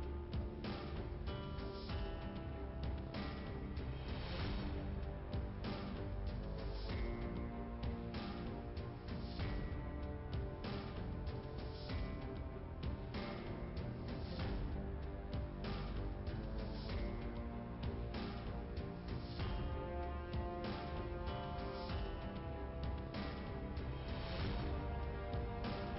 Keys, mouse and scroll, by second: 1.5 click, 3.5 click, 4.9 click, 6.2 click, 9.1 click, 9.9 click, 10.3 click, 10.6 click, 10.7 double click, 10.9 double click, 12.2 click, 13.2 click, 13.9 click, 14.4 click, 16.1 click, 16.3 click, 16.8 click, 18.5 click, 20.7 click, 21.5 scroll down 1, 24.5 click, 25.3 click.